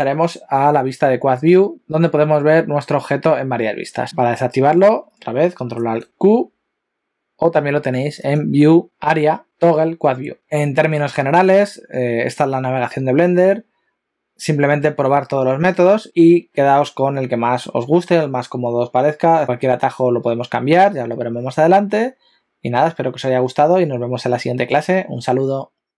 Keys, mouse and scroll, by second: 5.8 ctrl+alt+q, 8.2 click.